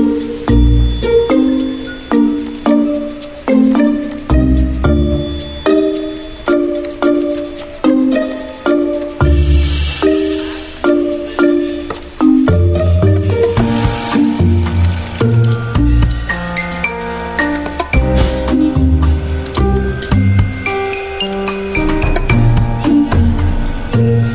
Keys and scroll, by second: 0.0-1.5 typing, 3.3 t, 8.0 t, 12.3 ctrl+alt+2, 14.8 ctrl+z, 15.4 d, 18.1 ctrl+2, 20.2 ctrl+2, 21.2 l.